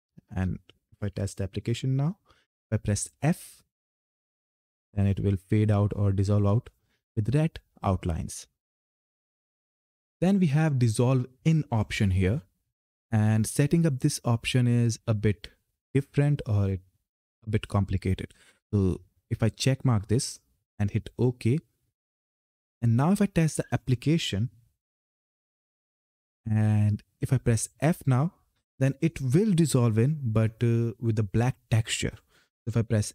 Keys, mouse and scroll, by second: 1.3 ctrl+F10, 3.1 f, 9.8 click, 19.1 click, 25.0 ctrl+F10.